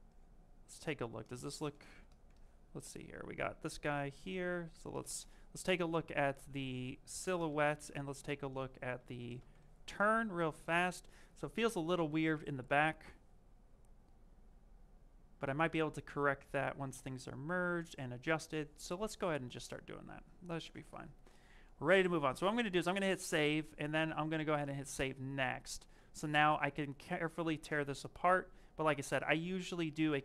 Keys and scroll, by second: 4.6 s, 7.1 s, 9.0 s, 25.8 shift+f.